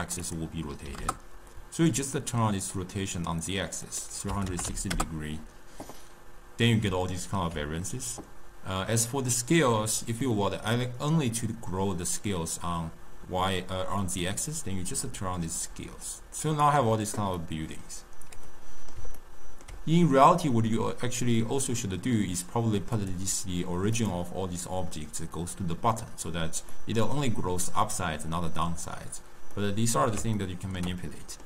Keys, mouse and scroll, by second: 6.8-7.5 d, 10.2-11.3 middle drag, 11.3 click, 14.1-17.3 drag, 17.3-22.9 middle drag, 22.9 click, 23.9 click, 26.7-31.4 middle drag.